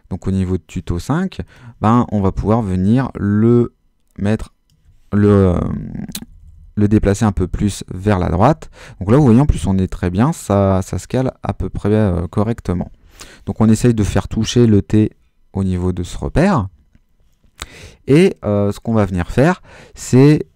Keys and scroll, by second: 5.5 shift+Right, 7.4 Left, 8.4 Right, 8.7 Left, 9.0 Right, 9.6 Left, 13.0 Left.